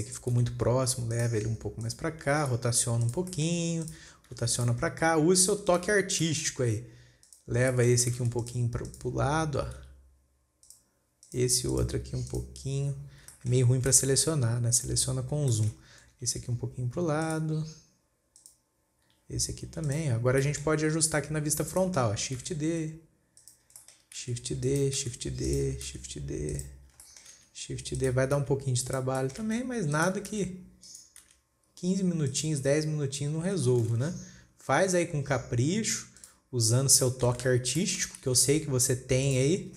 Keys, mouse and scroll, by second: 0.1 scroll up 2, 0.8 g, 1.9 scroll down 2, 2.3 click, 2.9 r, 3.8 shift+middle click, 4.3 click, 4.8 r, 5.3-5.9 scroll down 6, 6.1 click, 6.5 scroll up 2, 6.7-7.0 shift+middle drag, 7.0-7.7 scroll up 3, 7.7 click, 8.2 shift+middle drag, 8.4 scroll up 1, 8.6 alt+a, 8.9 click, 9.3 click, 10.3 g, 11.7 click, 12.1 click, 12.7 click, 13.6-14.5 scroll up 7, 14.0 shift+middle click, 14.5 alt+a, 15.1 click, 15.6-16.6 scroll down 6, 15.8-16.4 shift+middle drag, 16.6 g, 18.8 click, 19.5 g, 20.6 scroll down 3, 20.9 shift+middle click, 21.4-21.8 scroll down 2, 21.8 scroll up 4, 22.3-22.8 shift+middle drag, 22.8 shift+d, 24.3-24.7 shift+middle drag, 24.7 shift+d, 25.5 shift+d, 27.5 shift+middle click, 27.8 shift+d, 28.8 shift+d, 29.6 shift+middle click, 29.9 shift+d, 30.8 shift+d, 33.1 scroll up 6, 34.0 scroll down 4, 34.4 shift+d, 37.5-38.7 shift+middle drag, 38.7 shift+d.